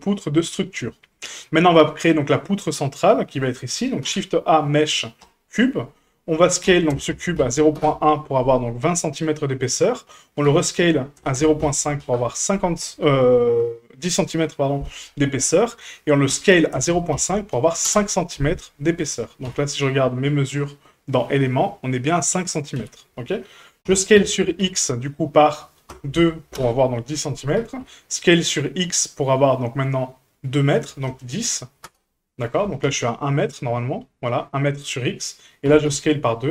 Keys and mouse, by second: 0.9 shift+middle drag, 1.3 middle click, 4.0 shift+a, 6.6 s, 10.4 s, 16.3 s, 19.4 n, 22.8 n, 23.8 s, 27.6 s, 32.8 n, 35.6 s.